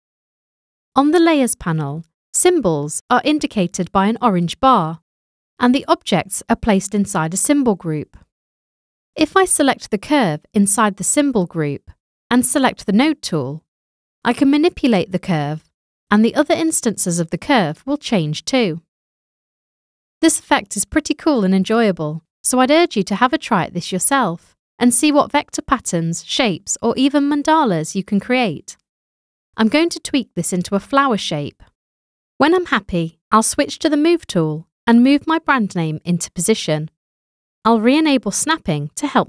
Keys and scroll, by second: 28.6 ;, 34.1 v, 38.6 ;.